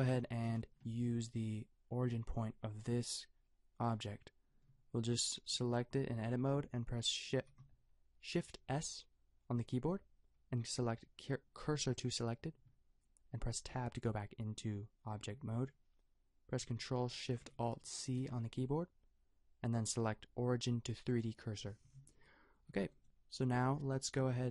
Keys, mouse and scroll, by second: 0.2 a, 7.3 shift+s, 13.7 Tab, 17.9 ctrl+alt+shift+c, 22.9-24.5 right drag.